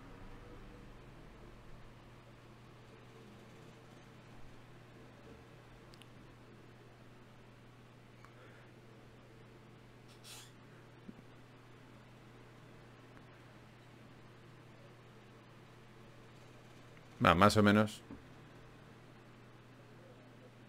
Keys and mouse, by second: 0.3 g, 2.1 click, 2.7 click, 3.5 g, 6.9 k, 9.5 click, 10.8 click, 10.9 g, 13.1-15.3 drag, 19.5 g.